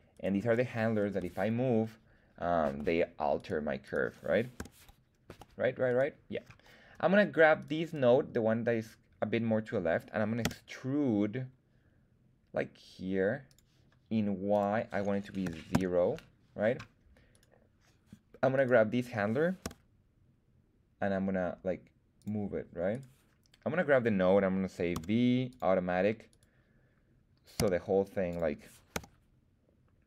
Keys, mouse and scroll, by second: 0.1 click, 0.1 right click, 1.1 g, 2.6 Escape, 3.3 right click, 3.8 right click, 4.5 g, 5.3 Escape, 5.8 right click, 7.6 click, 7.6 right click, 7.8 click, 7.8 right click, 10.4 e, 13.4 click, 14.5-17.4 drag, 17.3 right click, 18.5 right click, 19.6 g, 22.2 click, 22.9 right click, 24.9 v, 26.3 right click, 27.5 s, 28.3 click, 28.9 r.